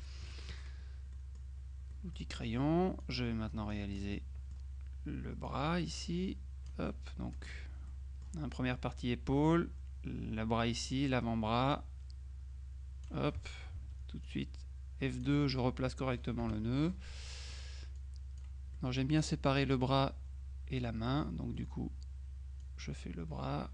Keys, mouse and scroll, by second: 0.1 F6, 0.1 click, 1.2 click, 2.4 click, 3.1-4.5 drag, 4.2 middle click, 5.5-7.3 drag, 7.9 click, 10.7 click, 11.8-13.6 drag, 14.3 F2, 14.3-15.8 drag, 16.5 F6, 16.6-19.0 drag, 16.6 right click, 18.8 right click, 22.7-23.7 drag.